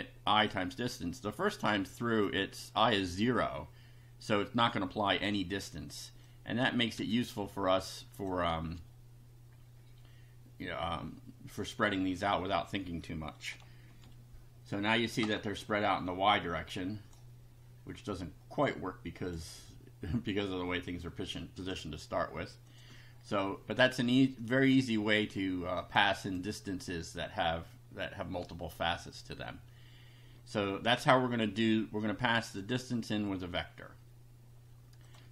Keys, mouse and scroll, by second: 0.4 click, 2.2 click, 6.2 click, 6.9 2, 8.1 click, 8.6 space, 13.9 F5, 15.6 middle click, 16.3 click, 18.6 click, 21.0 click, 21.8 middle click, 22.6 click, 22.9-24.4 middle drag, 24.4 click, 25.2 click, 25.8 click, 26.1 middle click, 26.2 click, 32.5 click, 35.0 click.